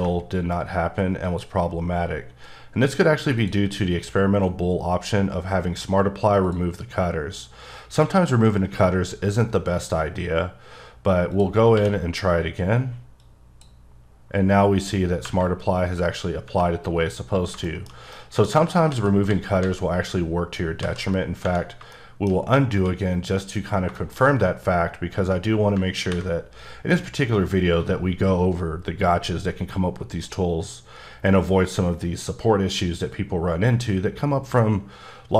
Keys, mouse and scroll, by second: 1.3 click, 3.4 click, 8.9 click, 11.3 click, 11.7 q, 13.2 click, 15.2 Tab, 16.5 Tab, 17.7 shift+middle click, 18.9 ctrl+z, 19.3 ctrl+z, 19.6 ctrl+z, 20.8 ctrl+z, 21.4 Tab, 21.9 shift+middle click, 23.7 scroll down 2, 24.0 shift+middle click, 30.1 click.